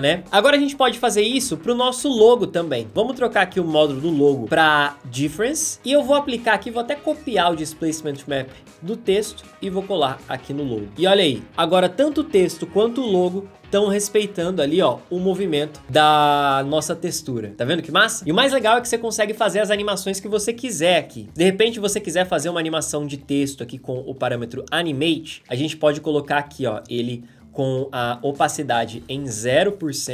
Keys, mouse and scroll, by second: 7.9 ctrl+c, 8.1 ctrl+c, 9.2 click, 10.0 ctrl+v, 10.9 space.